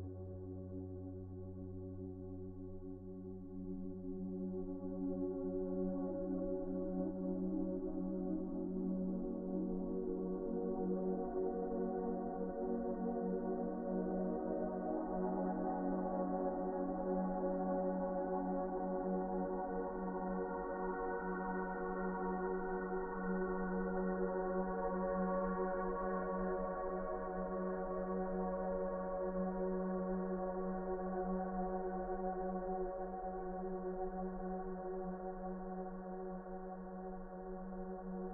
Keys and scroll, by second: 7.4 shift+r, 9.3 r, 11.5 shift+r, 13.9 shift+r, 15.9 shift+r, 18.9 shift+r, 21.9 shift+r, 24.4 shift+r, 32.2 shift+r.